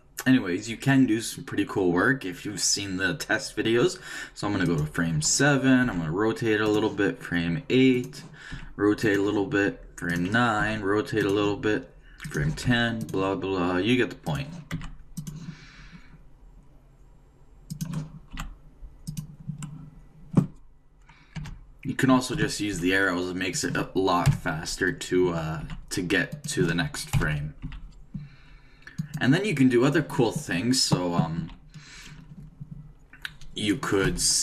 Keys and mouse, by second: 4.7-6.5 drag, 5.8 r, 8.0-9.9 drag, 8.5 r, 10.1-11.8 drag, 10.6 r, 12.2-14.0 drag, 12.6 r, 14.2 click, 14.7 r, 18.3 r, 21.4 Right, 22.7 r, 24.2 Right, 25.6 r, 27.2 Right, 27.6 r, 31.4 a.